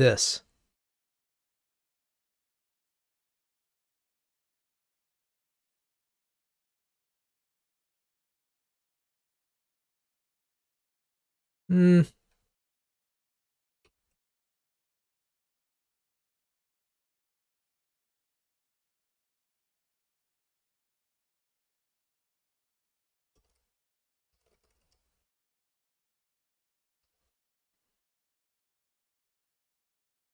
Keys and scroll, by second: 12.5 super+z, 27.0 ctrl+r.